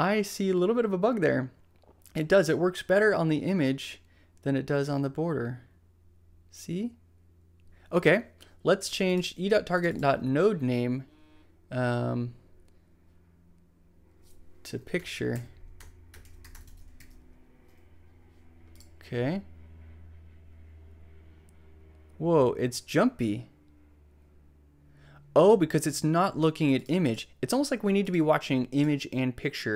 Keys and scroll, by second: 14.9-17.1 typing.